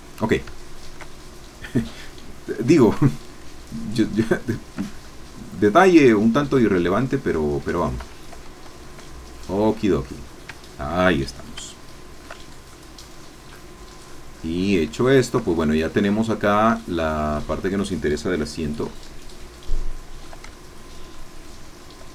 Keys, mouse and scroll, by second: 0.5 ctrl+shift+click, 3.1-4.2 ctrl+drag, 4.3 ctrl+shift+click, 4.6 shift+middle click, 5.0-6.4 shift+middle drag, 6.4-6.9 scroll down 2, 6.9-7.5 scroll down 1, 7.7 Escape, 9.0-10.2 scroll down 6, 10.2-10.8 scroll down 1, 11.7-13.0 shift+middle drag, 13.0-13.4 shift+scroll up 3, 13.4 scroll down 2, 13.5-13.8 scroll up 2, 13.8 scroll down 2, 13.9 scroll up 2, 14.1-14.8 scroll down 2, 14.8 scroll down 1, 15.0-16.0 shift+middle drag, 16.1-16.7 shift+scroll up 2, 16.8 shift+middle click, 18.9 Caps_Lock, 18.9-20.4 drag, 20.5-21.9 shift+drag.